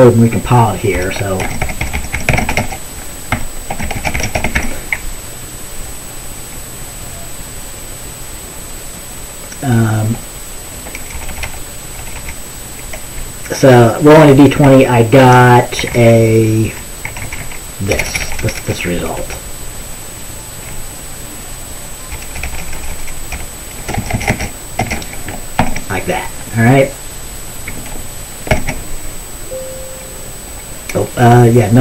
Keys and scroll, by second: 1.0-5.2 typing, 11.3-12.1 typing, 14.4 End, 14.7 Left, 15.2 Left, 15.3 Left, 15.6 Left, 15.9 Down, 16.0 Left, 16.5 Left, 17.7 Left, 18.0-19.3 typing, 20.8-24.4 typing, 25.7 ctrl+s, 28.6 ctrl+b.